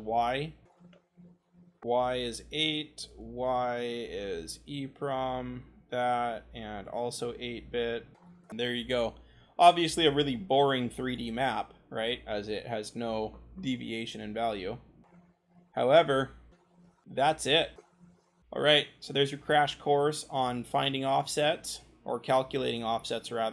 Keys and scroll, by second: 0.0 c, 2.2 8, 8.2 ctrl+v, 16.6 w, 18.0-18.3 scroll, 22.8 w.